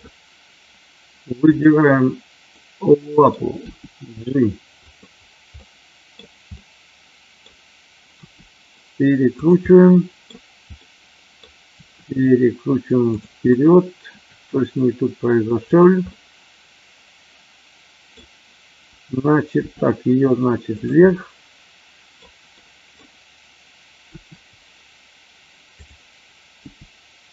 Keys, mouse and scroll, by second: 1.5 click, 2.5-3.2 middle drag, 3.6 g, 4.7 click, 5.6-6.1 middle drag, 6.1 scroll down 1, 6.5 scroll up 1, 6.6-7.3 middle drag, 8.1 r, 9.6-10.2 middle drag, 10.8-11.3 middle drag, 11.7 r, 13.1 click, 13.5-14.0 middle drag, 14.0 scroll down 1, 14.2 r, 15.6 click, 16.1-18.2 middle drag, 19.6 g, 20.7 click, 20.9-22.1 middle drag, 22.6 middle drag, 22.8 scroll down 1, 24.1 r, 25.7 click, 26.6 g.